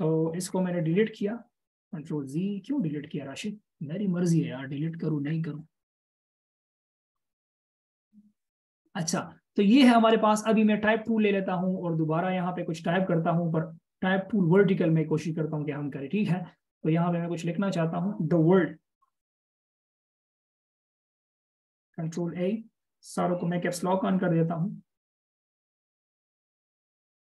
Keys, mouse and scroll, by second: 1.0 BackSpace, 2.8 ctrl+z, 4.8 shift+super+w, 5.1-5.6 shift+super+scroll up 1, 5.6 scroll down 1, 6.9-7.4 scroll up 1, 11.3 right click, 24.1 typing, 25.5-27.3 typing.